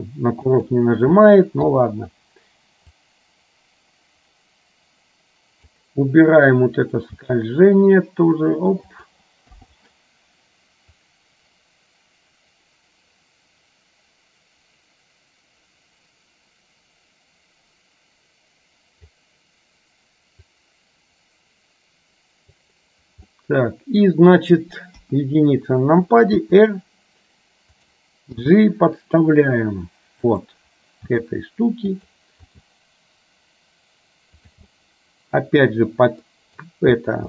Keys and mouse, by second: 3.2-5.9 drag, 7.3 g, 9.7 i, 11.3-19.3 drag, 20.7-22.8 drag, 23.3 middle click, 25.0 KP_1, 26.5 r, 28.4 g, 31.2 r, 32.5 g, 34.8 middle click, 36.3 middle click.